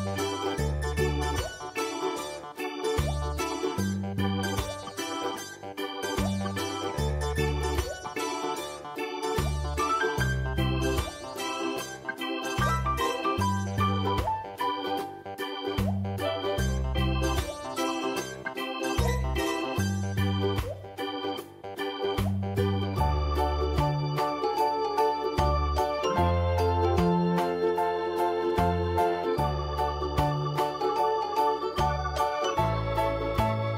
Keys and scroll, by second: 2.7 ctrl+space, 3.5 ctrl+space, 4.4 ctrl+space, 5.1 ctrl+space, 5.4 Tab, 26.1 ctrl+d, 28.0 typing, 29.3 ctrl+z, 30.0 ctrl+z, 31.8 v, 33.4 ctrl+i.